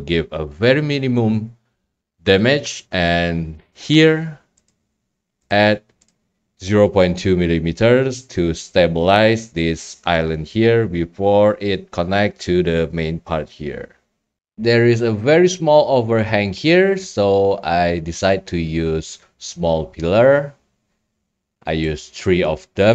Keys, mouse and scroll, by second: 4.0 click, 4.7 click, 5.8-7.2 drag, 14.4 scroll, 21.4-21.9 scroll, 22.2 right click, 22.4-22.9 scroll.